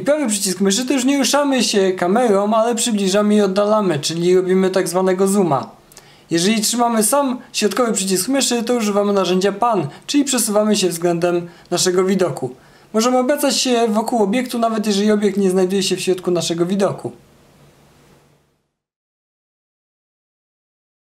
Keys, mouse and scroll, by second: 5.9-11.0 middle drag, 11.7-16.5 alt+drag.